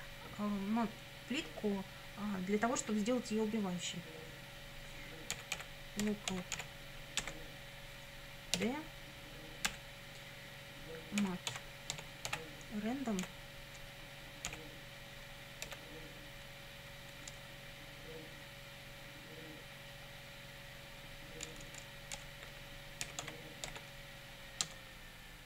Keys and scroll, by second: 5.1-7.2 typing, 8.6 d, 10.5-12.8 typing, 14.5 ., 15.7 r, 17.1 BackSpace, 21.5-24.2 typing, 24.6 Tab.